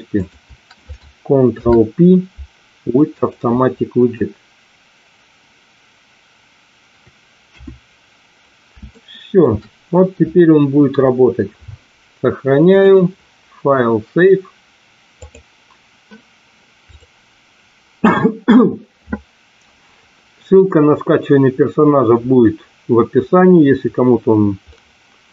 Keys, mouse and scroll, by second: 0.1 shift+click, 1.6 ctrl+p, 7.5 KP_1, 8.8 shift+middle click, 12.7-15.4 drag, 16.9 click, 24.7-25.3 middle drag.